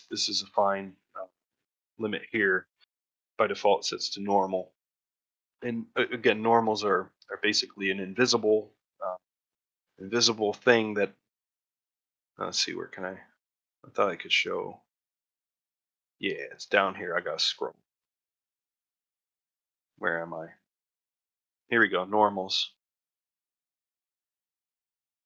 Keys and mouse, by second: 4.5 click, 5.6 middle drag, 6.4 ctrl+middle drag, 6.7 middle drag, 7.4 middle drag, 7.9 shift+middle click, 11.5-23.8 drag, 24.1 middle click, 24.7 shift+middle click, 24.9 middle click.